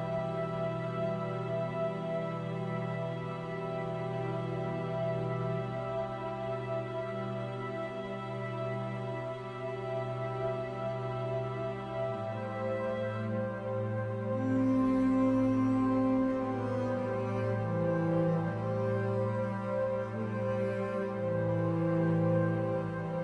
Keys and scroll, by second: 10.7 ctrl+z.